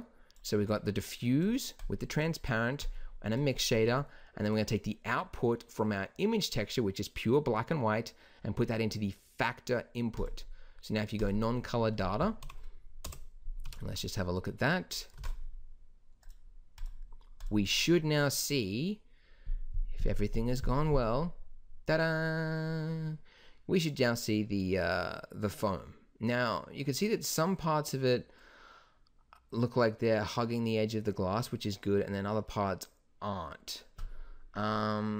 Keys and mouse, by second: 12.4 KP_Decimal, 13.0 KP_0, 13.6 shift+b, 15.1 ctrl+s.